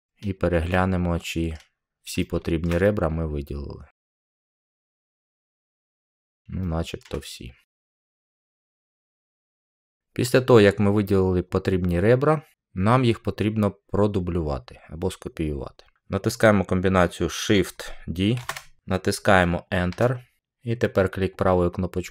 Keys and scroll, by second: 18.3 d, 19.8 Return.